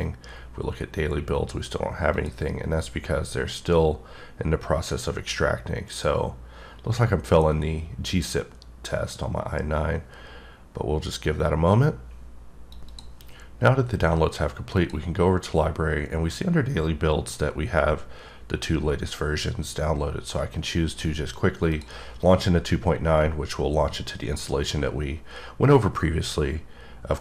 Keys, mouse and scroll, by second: 0.0 click, 2.3 click, 21.7 click.